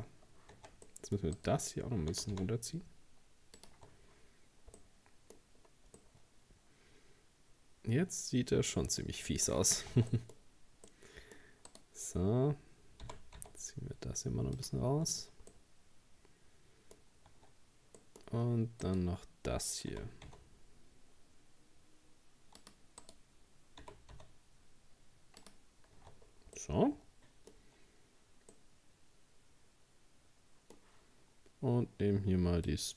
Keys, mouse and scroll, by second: 0.1-0.6 scroll up 3, 0.6 Tab, 0.9 middle click, 1.4 right click, 2.1 g, 3.7 Tab, 4.0-4.8 scroll down 4, 4.8 middle click, 5.6-6.0 scroll down 2, 6.0-9.0 middle drag, 9.3 shift+middle click, 9.5-10.9 scroll up 5, 9.9 Tab, 10.1 middle click, 10.9 middle click, 11.7 right click, 13.0 g, 14.9 Tab, 15.2-15.5 scroll down 1, 15.5-17.0 middle drag, 17.0-17.3 scroll up 2, 17.3 Tab, 18.0 middle click, 18.8 right click, 19.9 g, 23.0 right click, 23.8 g, 26.0 Tab, 26.2-26.6 scroll down 3, 26.6-31.5 middle drag, 32.7-32.9 drag.